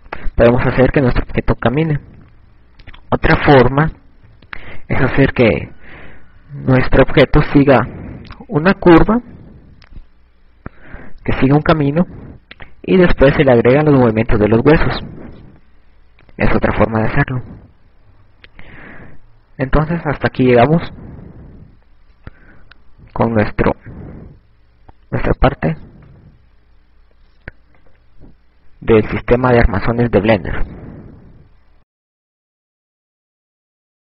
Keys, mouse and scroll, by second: 0.0-2.3 typing, 5.2 KP_4, 6.1 KP_2, 7.4 KP_2, 7.8-8.3 KP_6, 18.1 KP_6, 22.5 KP_2, 23.7 a, 27.9 click.